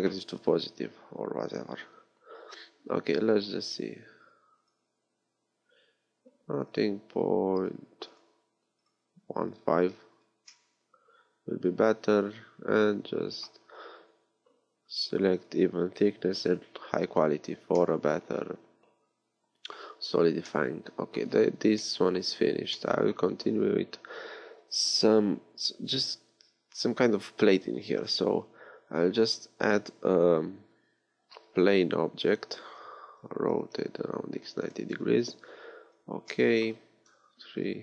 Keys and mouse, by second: 11.5 click, 15.4-17.7 drag, 17.9 click, 19.9 middle click, 23.3 a, 28.7 shift+a, 33.2 r, 36.3-37.8 drag, 37.1 KP_3.